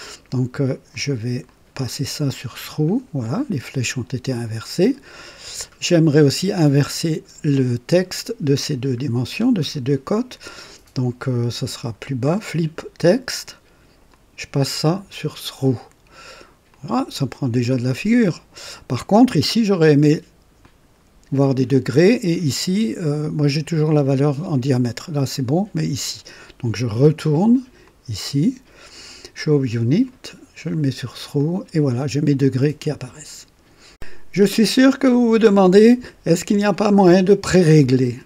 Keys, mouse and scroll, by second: 0.8 click, 1.4 click, 2.2 click, 9.0-9.5 scroll down 2, 11.7 scroll down 2, 13.0 click, 14.1 click, 16.6 click, 20.5 click, 27.8 click, 29.7 click, 30.7 click, 31.3 click, 33.8 click.